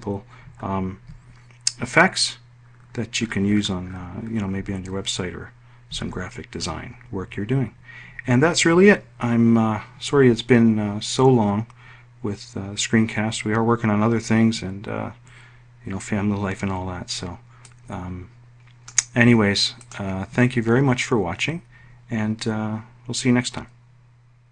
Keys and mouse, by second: 16.9-18.2 drag, 19.0 click.